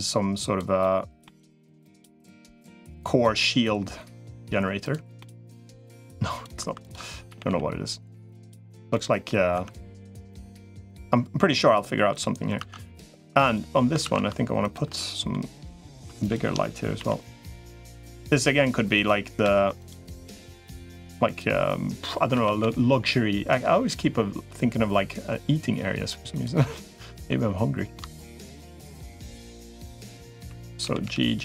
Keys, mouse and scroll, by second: 0.6 middle click, 1.7-3.1 drag, 3.2 middle click, 5.0 middle click, 5.7 click, 6.5 2, 7.1 g, 8.7 middle click, 9.3 Tab, 10.0 middle click, 10.4 middle click, 11.0 middle click, 13.1 3, 13.9 ctrl+s, 14.8 middle click, 17.7 i, 19.3 alt+e, 22.3 a, 22.5 g, 26.5 middle click, 27.7 shift+middle click, 28.3 middle click, 29.3 click, 29.9 click, 30.3 3, 30.7 g.